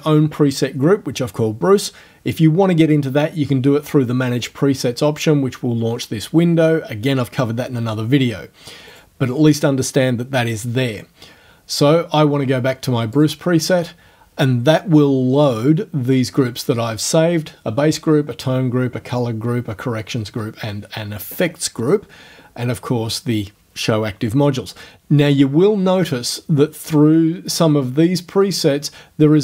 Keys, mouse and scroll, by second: 4.5 click, 8.9 click, 13.2 click, 25.2 click, 28.5 click.